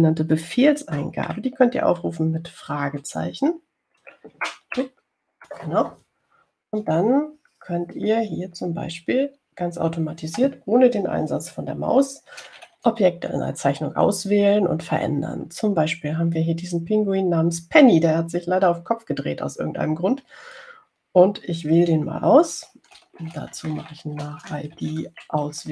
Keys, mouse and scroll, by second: 6.0 shift+ß, 24.2-25.7 typing.